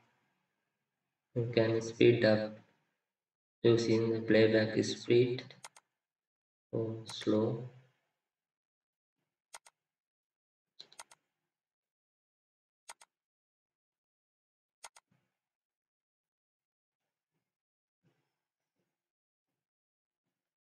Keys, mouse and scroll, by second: 18.1-19.6 scroll up 1, 19.6-20.3 scroll down 1, 20.3-20.7 scroll up 1.